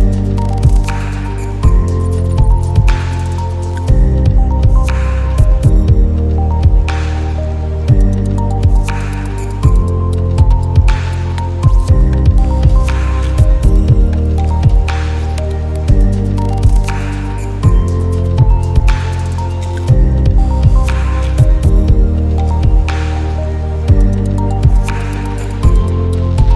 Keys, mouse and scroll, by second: 0.4 click, 0.9 ctrl+z, 2.1-9.7 drag, 3.8-4.8 drag, 5.7 click, 9.7-11.4 drag, 12.4-13.9 drag, 22.8 click.